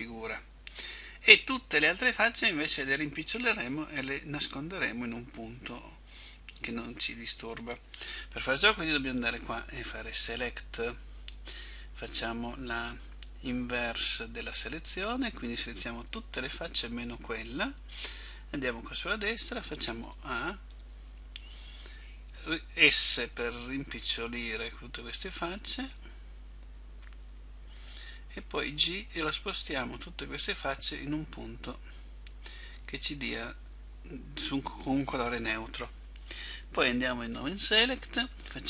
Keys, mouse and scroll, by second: 18.7 right click, 20.2 a, 20.8 a, 23.3 s, 29.0 click, 29.0 g.